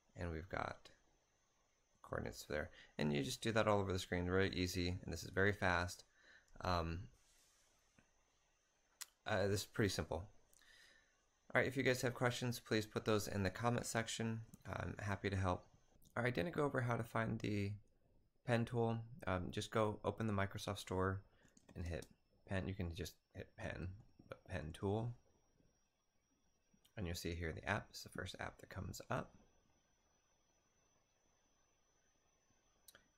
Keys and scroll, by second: 1.9-3.0 typing, 14.5 typing, 21.3-22.2 typing, 23.4-25.0 typing.